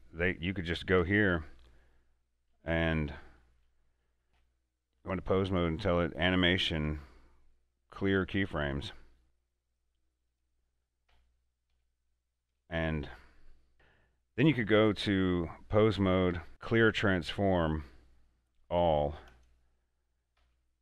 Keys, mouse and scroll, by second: 1.1 a, 1.4 a, 3.2 alt+h, 4.3 click, 4.4 Tab, 5.5 click, 8.9 click, 11.2 Tab, 11.8 a, 12.6 a, 12.8 Tab, 13.7 click, 16.4 click, 16.4 Tab, 19.3 click, 20.4 a.